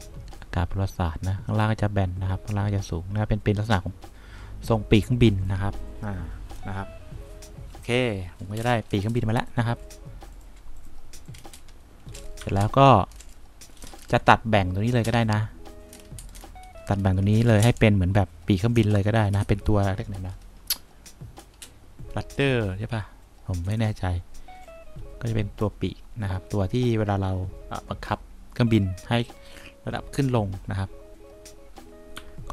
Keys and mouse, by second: 2.5 click, 3.5-5.6 drag, 12.5 3, 32.3 3.